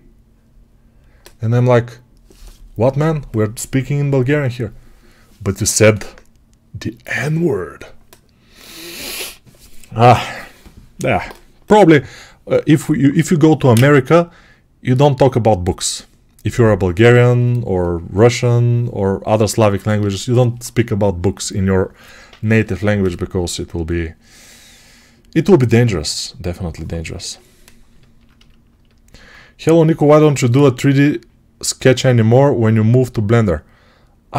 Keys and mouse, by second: 30.4-34.3 right drag.